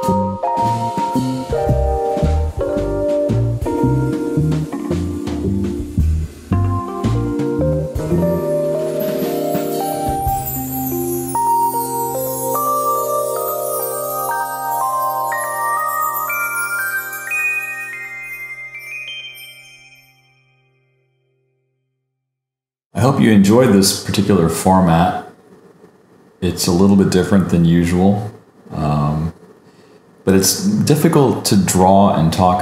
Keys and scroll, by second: 1.3 super+j, 1.4 super+u, 4.3 alt+BackSpace, 4.4 super+d, 5.2 super+-, 5.3 super+=, 6.9 super+z, 8.9 super+d, 14.0 Escape, 16.1 Escape, 16.5 super+j, 16.6 super+u, 21.1 super+j, 21.2 super+u, 26.6 super+=, 27.6 alt+shift+super+n, 28.4 super+z, 31.6 super+z, 32.5 super+z.